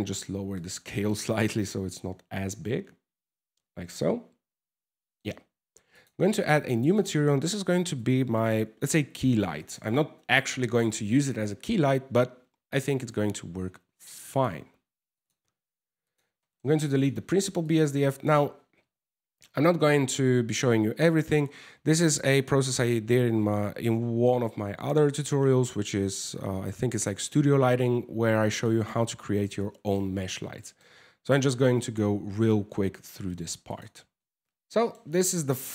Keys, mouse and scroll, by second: 0.5 middle click, 5.5 click, 6.3 click, 6.5 click, 15.6 click, 16.0 middle click, 16.5 click, 17.3 click, 18.1 ctrl+c, 19.2 x, 28.1 click, 29.2 middle click, 29.7-30.1 scroll up 4, 30.2 middle click, 30.6 scroll down 2, 33.0 shift+q, 33.3 click, 34.2 middle click, 34.2 scroll up 4, 34.2 g, 34.3 middle click, 34.7 scroll down 2.